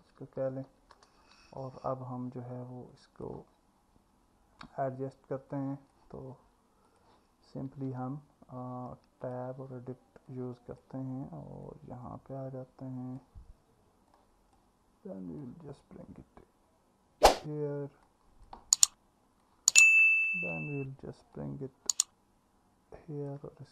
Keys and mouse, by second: 3.0 click, 5.5 click, 6.9 click, 8.0 Tab, 10.3 click, 14.3 click, 18.1 click, 19.4 click.